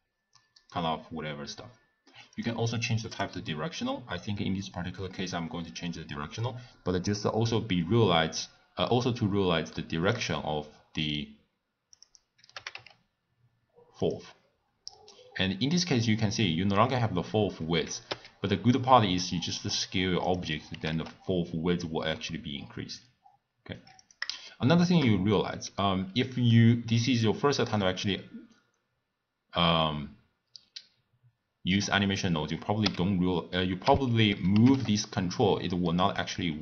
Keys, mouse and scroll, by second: 2.3-5.3 drag, 6.4-9.4 middle drag, 10.0 click, 12.0 click, 12.5 g, 15.7-18.1 middle drag, 18.1 s, 20.7 g, 24.4-29.7 shift+middle drag, 32.8 n, 33.8 n, 34.5 g.